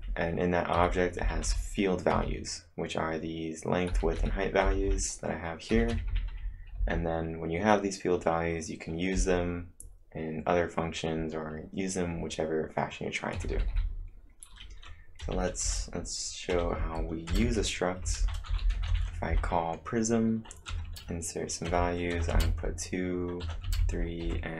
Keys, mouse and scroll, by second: 0.0-0.9 typing, 1.9-2.7 typing, 5.9-6.8 typing, 13.4-13.7 typing, 15.3 o, 15.7 Return, 16.3-20.7 typing, 22.2-24.5 typing.